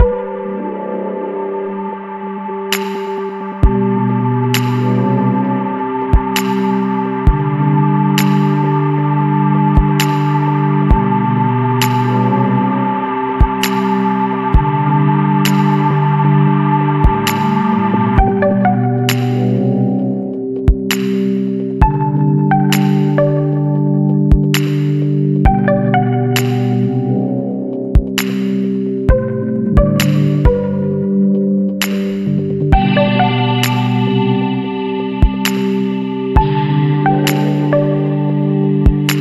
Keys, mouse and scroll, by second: 0.2 click, 3.9 click, 5.9-6.3 scroll up 1, 7.0 scroll down 1, 7.4-11.2 middle drag, 7.6-9.5 drag, 13.6 click, 14.9 click, 17.4 click, 20.8 click, 23.0 click, 25.7 click, 27.0 click, 27.8 space, 28.7-29.0 scroll down 1, 29.9-30.7 scroll up 2, 31.5 scroll up 1, 33.7 click, 34.8 click, 37.8 click.